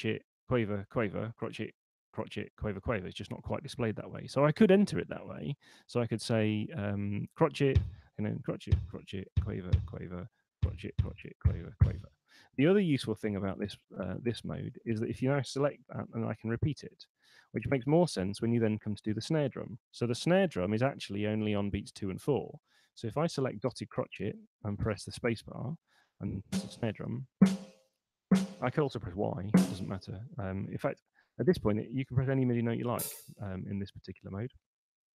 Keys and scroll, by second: 6.1 6, 9.1 5, 10.3 6, 11.3 5, 13.1 Escape, 16.1 r, 23.1 6, 24.9 space, 27.2 space, 29.3 y, 31.1 super+z, 32.1 space.